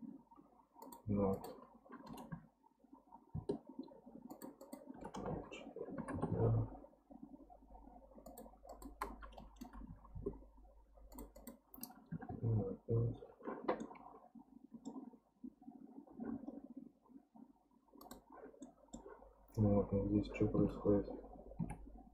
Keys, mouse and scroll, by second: 0.8-3.9 drag, 4.3-7.4 drag, 8.3-9.6 drag, 9.6 BackSpace, 11.1-13.8 drag, 13.8-15.1 middle drag, 15.1-15.6 scroll up 5, 18.0 click, 18.6-20.7 middle drag, 20.7 Tab, 21.6 Tab.